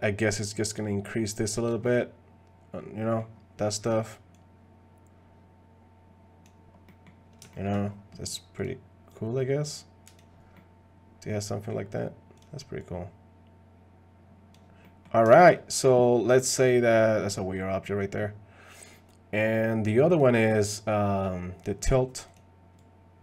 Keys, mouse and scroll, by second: 1.8-3.2 middle drag, 3.9 click, 4.3-6.5 drag, 6.9 middle click, 7.5 shift+middle click, 8.6 click, 9.1-10.2 drag, 10.5-11.7 middle drag, 12.8-14.5 drag, 14.8 middle click, 15.3 shift+middle click, 17.0 middle click, 17.3 middle click, 20.1 click, 22.8-23.2 drag.